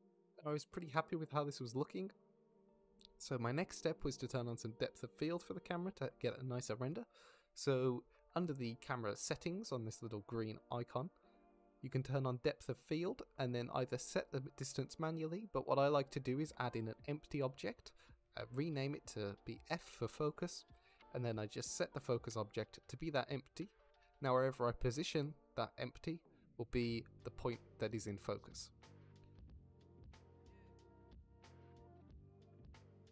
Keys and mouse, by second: 0.0 ctrl+`, 0.0 t, 0.7-1.9 drag, 2.6-3.0 drag, 3.3 z, 4.0 shift+click, 4.3 drag, 7.3-7.7 drag, 7.8 middle drag, 9.0 shift+middle click, 9.6 middle drag, 10.7-11.8 middle drag, 13.6-13.9 middle drag, 14.2 shift+middle click, 14.5 middle drag, 15.5 middle drag, 16.6 middle click, 17.3 shift+a, 21.1-21.5 middle drag, 22.1 middle drag, 23.0 s, 23.8 s, 24.0 click, 24.2 g, 24.7 click, 25.1-25.5 drag, 25.6 g, 25.9 click, 26.2-26.6 drag, 26.9 g, 27.7 shift+click, 28.0-28.4 drag, 29.0-29.3 drag, 31.4 F2, 32.6 click.